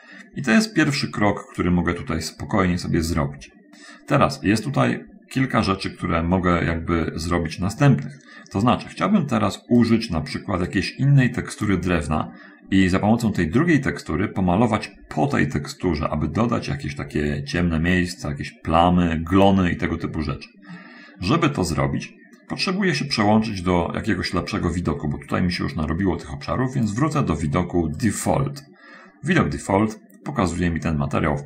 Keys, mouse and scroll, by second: 1.3 click, 5.0 middle click, 6.0 middle click, 6.5-7.1 scroll up 1, 10.2 click, 10.9-12.2 drag, 12.4 middle click, 13.9-14.7 scroll up 1, 19.9-20.3 scroll down 1, 21.1 middle click, 27.2 click, 28.4 click, 29.9 middle click, 31.1-31.4 scroll down 1.